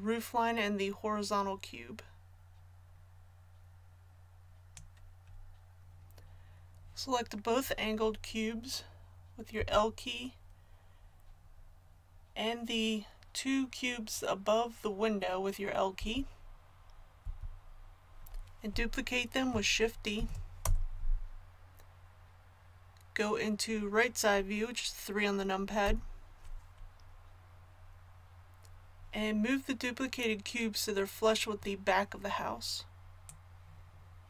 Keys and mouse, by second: 9.5 l, 15.9 l, 17.2 l, 20.2 shift+d, 25.8 KP_3, 33.2-34.2 drag.